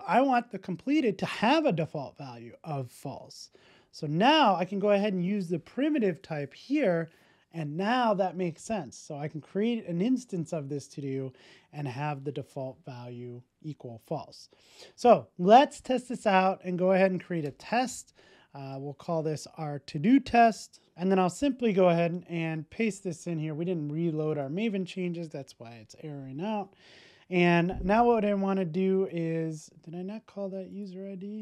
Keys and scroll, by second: 4.6 Return, 5.1 super+s, 16.0 alt+Return, 22.2 super+v, 22.5 super+s, 24.4 shift+super+i.